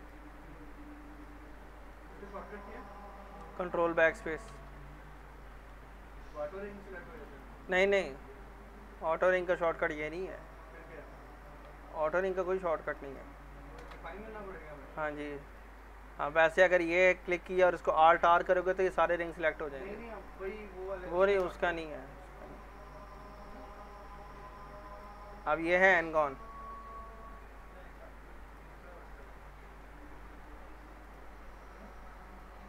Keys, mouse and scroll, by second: 1.8 middle click, 2.6 scroll up 1, 4.5 ctrl+BackSpace, 5.2 scroll down 1, 5.4 middle click, 7.1 click, 7.1 click, 7.6 alt+middle click, 8.0 scroll up 1, 9.2 middle click, 9.7 scroll down 1, 11.2 click, 12.1 ctrl+click, 13.8 ctrl+BackSpace, 15.5 click, 16.0-16.9 scroll down 1, 16.9 click, 18.0 alt+r, 18.6 alt+middle click, 19.2 click, 20.6 middle click, 21.4 ctrl+BackSpace, 22.2 alt+middle click, 22.7 scroll up 1, 22.8 middle click, 23.3 middle click, 25.0 click, 25.8 alt+q, 28.5 click, 29.0 alt+middle click, 29.3 scroll up 1, 29.6 alt+middle click, 31.0 click.